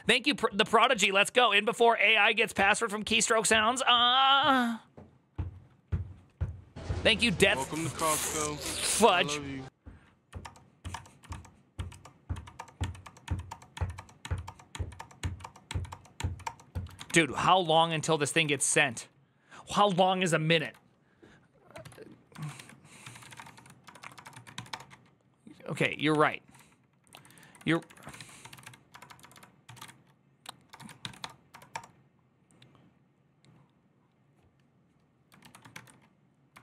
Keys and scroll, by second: 9.0 alt+{, 10.1 Up, 10.2 Return, 10.6 Up, 10.7 Return, 11.0 Up, 11.0 Return, 11.5 Up, 11.7 Return, 12.1 Up, 12.3 Return, 12.6 Up, 13.0 Up, 13.3 Return, 13.5 Up, 13.7 Return, 14.0 Up, 14.2 Return, 14.5 Up, 14.7 Return, 14.7 Up, 15.0 Up, 15.2 Return, 15.4 Up, 15.7 Return, 15.9 Up, 16.2 Return, 16.6 ctrl+a, 16.8-18.9 typing, 21.6 alt+{, 22.1-24.8 typing, 25.6 ctrl+c, 25.9 Up, 26.1 ctrl+Left, 26.2 ctrl+Left, 26.5 ctrl+Left, 27.5 Right, 27.6 Right, 27.8 Right, 27.9-31.5 typing, 35.2 ctrl+a, 36.4 ctrl+u, 36.4 1, 36.5 ctrl+u.